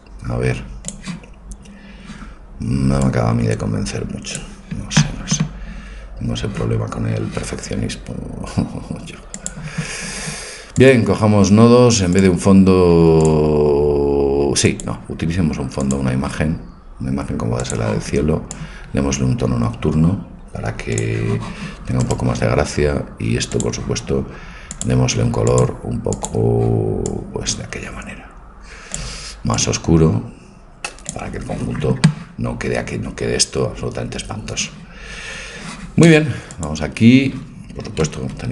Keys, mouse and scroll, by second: 1.3-3.5 middle drag, 3.0-5.9 drag, 5.9-9.3 middle drag, 10.9-17.7 drag, 18.5-20.4 drag, 22.0-24.8 right drag, 23.5-28.0 drag, 36.5-38.5 drag.